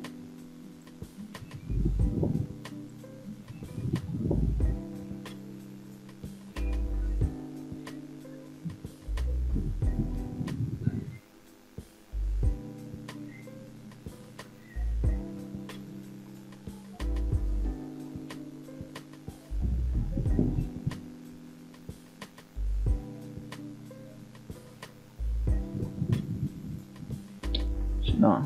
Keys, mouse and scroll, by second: 0.5 shift+middle click, 1.0 middle click, 2.2 ctrl+right click, 3.1 middle click, 3.6-4.1 scroll up 2, 4.7 ctrl+right click, 6.1 shift+click, 7.0 shift+click, 7.7 shift+click, 8.7 f, 9.1 click, 10.1 shift+click, 11.6 f, 12.2 f, 12.5 middle click, 13.5 f, 13.5 scroll down 1, 14.0 shift+middle click, 14.5 middle click, 15.3-15.7 scroll up 2, 15.7-18.1 middle drag, 18.7-19.9 middle drag, 20.2 shift+middle click, 20.8 middle click, 21.8 click, 22.6 middle click, 23.5-23.9 scroll down 2, 23.9 middle click, 24.7 scroll up 2, 25.2 shift+middle click, 25.9-26.4 scroll up 2, 26.9 ctrl+right click, 28.3-28.4 middle drag.